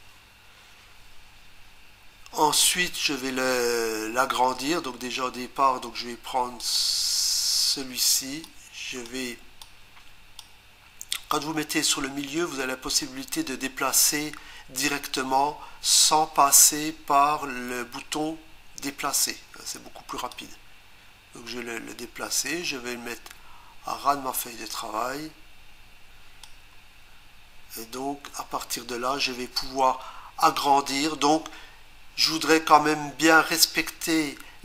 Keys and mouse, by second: 6.6 click, 8.5 click, 9.6 click, 20.3 click.